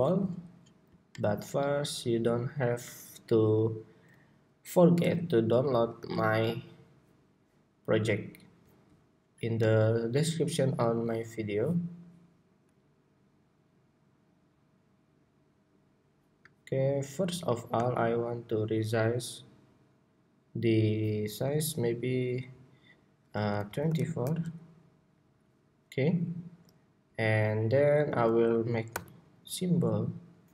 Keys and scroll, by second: 5.7 super+v, 28.6 super+k, 29.4 super+k.